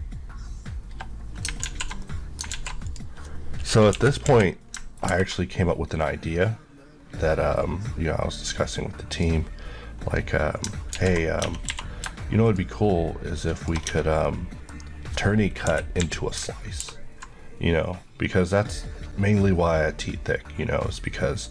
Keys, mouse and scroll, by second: 1.7 alt+z, 2.1 middle click, 2.6 alt+z, 3.2 click, 4.0 KP_1, 4.3 KP_3, 5.1 ctrl+b, 7.0-7.8 scroll up 2, 9.2 click, 11.0 z, 11.5 Tab, 11.8 q, 12.5 shift+click, 13.6 shift+Left, 14.0 Tab, 14.3 middle click, 15.8 KP_1, 16.0 KP_3, 16.9 ctrl+b.